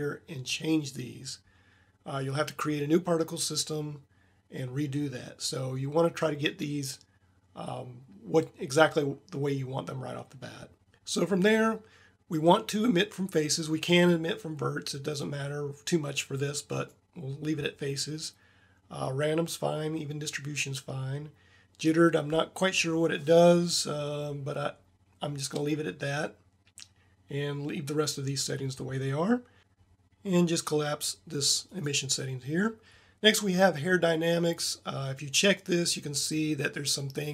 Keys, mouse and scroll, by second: 13.7 click, 13.9-15.4 drag, 31.5 click, 31.8-33.3 drag, 34.3-36.5 drag.